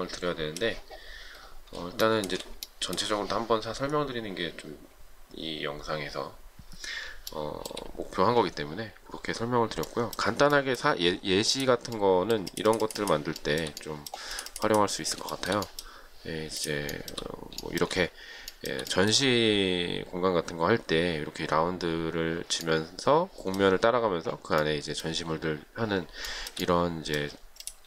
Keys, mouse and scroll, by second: 2.3 shift+middle click, 7.6 shift+middle click, 13.7 shift+middle click, 15.6 shift+middle click, 17.2 shift+middle click, 17.9 shift+middle click, 18.8 shift+middle click, 26.5 shift+middle click.